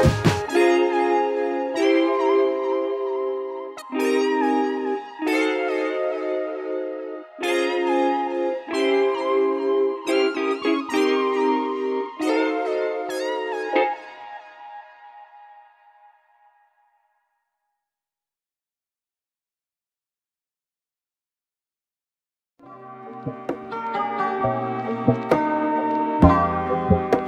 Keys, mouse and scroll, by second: 20.0-20.5 drag, 20.6-23.9 middle drag, 23.9 drag, 24.6-25.3 middle drag, 25.3 Tab, 25.6-26.1 scroll down 1, 26.1 middle click, 26.6-27.2 scroll up 2.